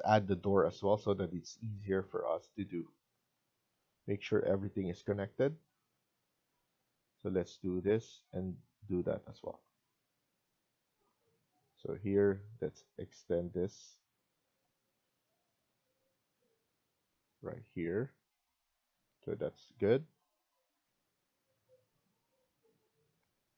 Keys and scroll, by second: 0.2 Escape, 0.5 Escape, 4.2 Escape, 17.6 Escape, 17.9 Escape, 23.1 F1.